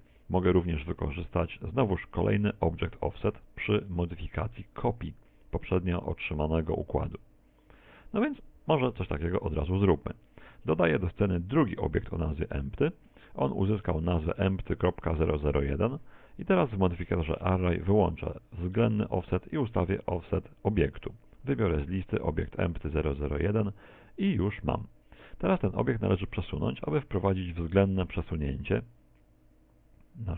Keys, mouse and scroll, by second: 10.7 shift+a, 16.9 right click, 18.6 click, 19.6 click, 20.8 click, 25.9 click, 27.5 click.